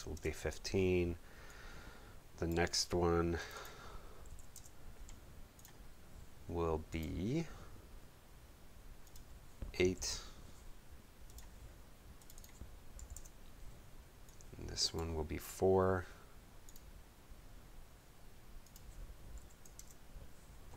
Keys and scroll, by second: 0.0-0.3 typing, 4.0-4.8 typing, 10.0 8, 13.0 8, 13.1 Page_Up, 19.4 4, 19.7 Page_Up.